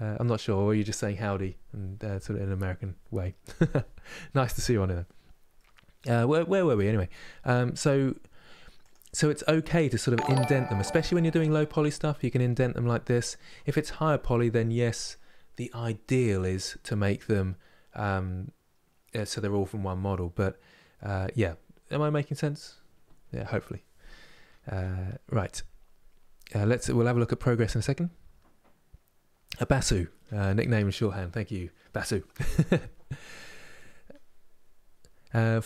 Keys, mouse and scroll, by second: 5.2-8.6 middle drag, 8.6 z, 9.0 scroll up 3, 9.5-35.6 middle drag.